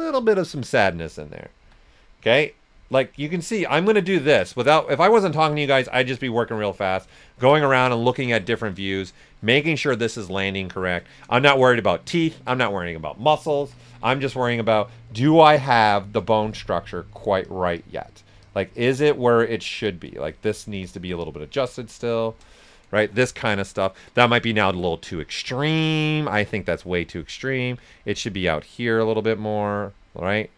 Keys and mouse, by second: 1.2 click, 1.2-1.6 typing, 4.0 click, 4.2 ctrl+right click, 5.0 ctrl+right click, 5.3-6.0 typing, 5.5 click, 7.3 ctrl+right click, 7.6 ctrl+alt+right click, 10.5 shift+click, 11.4 shift+click, 12.3 ctrl+right click, 13.3-14.7 typing, 14.3 click, 22.6 right click, 23.1 typing, 24.7 s, 24.8 click, 25.6 s, 26.0 click, 27.8 right click, 28.3 click.